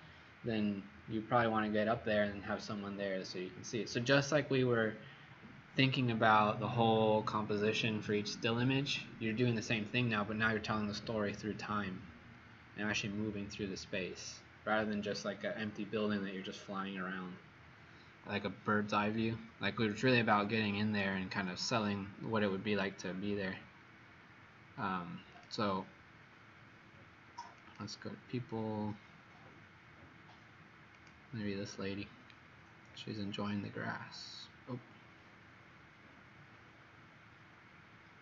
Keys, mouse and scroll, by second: 25.4 click, 32.4 scroll down 3.